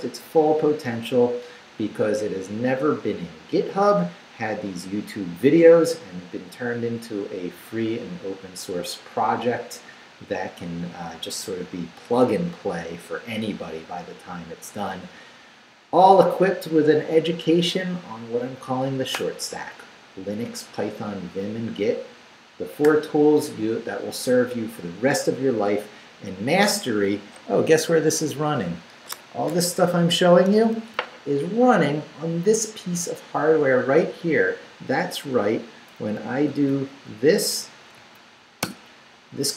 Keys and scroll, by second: 36.5 shift+;, 37.1 shift+Up, 38.0 Down, 38.6 Return.